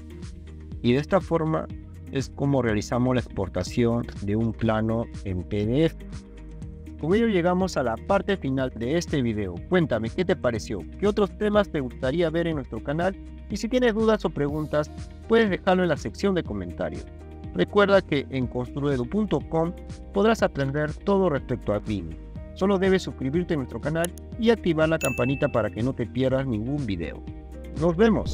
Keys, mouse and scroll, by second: 2.0 click.